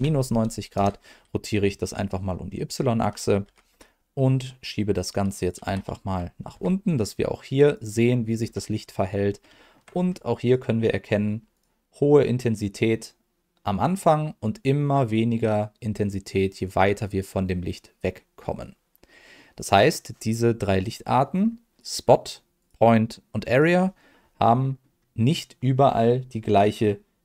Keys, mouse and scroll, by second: 0.7 KP_Enter, 3.4 g, 3.7 z, 5.4 click, 5.6 g, 6.5 x, 7.6 click, 8.4 KP_7, 9.2 scroll up 1, 9.5 shift+middle click, 9.9-10.4 scroll up 1, 10.4 click, 11.5 click, 18.3-19.3 scroll down 2, 19.3 middle click, 21.4 scroll up 1, 21.7 click, 22.6 click, 23.4 click, 24.3 middle click.